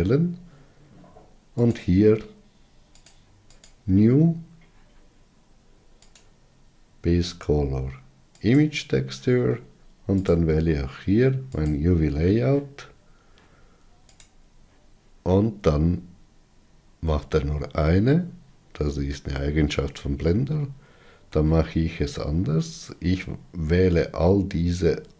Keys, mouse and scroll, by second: 4.3-14.6 drag, 17.9-20.9 middle drag.